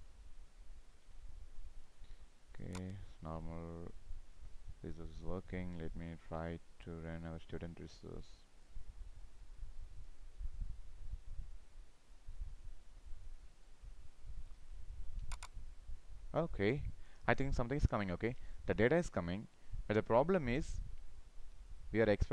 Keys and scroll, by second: 10.9 ctrl+c, 14.5 ctrl+v.